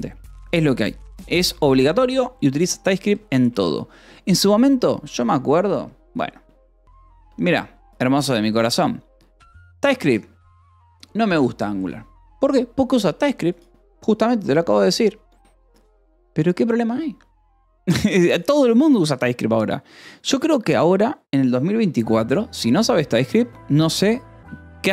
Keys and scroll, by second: 0.0 ctrl+s, 1.9 ctrl+s, 2.8 o, 3.1 :, 3.3 space, 7.4 space, 19.3 Return.